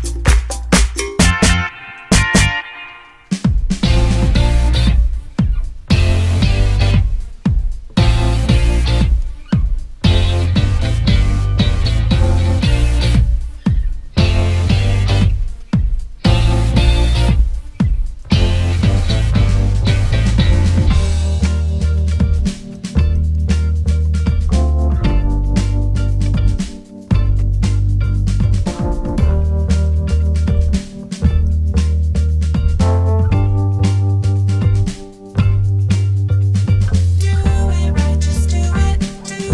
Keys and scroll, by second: 0.2 Escape, 0.8 Escape, 1.0 d, 2.9 Escape, 3.0 ctrl+z, 3.5 d, 4.4 1, 4.7 BackSpace, 4.8 5, 4.9 Return, 6.4 Escape, 12.1 1, 12.3 Return, 14.0 Escape, 15.3 Escape, 31.6 Escape, 32.6 0, 33.1 Escape, 33.8 ctrl+z, 37.1 ctrl+z.